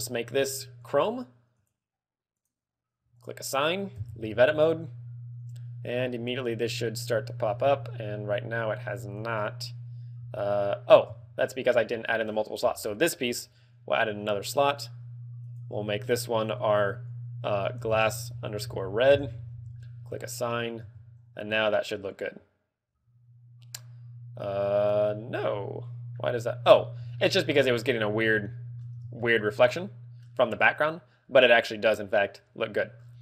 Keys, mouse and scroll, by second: 0.8 click, 1.0 click, 1.5 click, 2.7 click, 3.1 click, 3.2 click, 4.3 Tab, 7.5 scroll down 3, 8.0 z, 8.1 scroll up 1, 9.4 right click, 10.3 z, 10.4 z, 11.3 Tab, 12.3 a, 12.6 l, 13.9 l, 14.6 click, 14.9 click, 15.4 click, 20.1 click, 20.3 click, 21.1 Tab, 25.3 middle click, 27.1 shift+middle click, 28.3 shift+middle click, 29.1 ctrl+middle click, 32.9 scroll down 5.